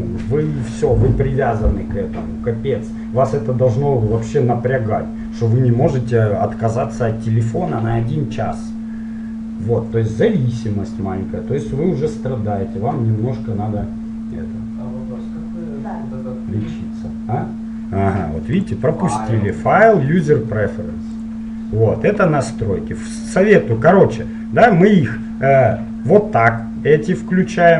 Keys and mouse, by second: 19.6-21.6 drag.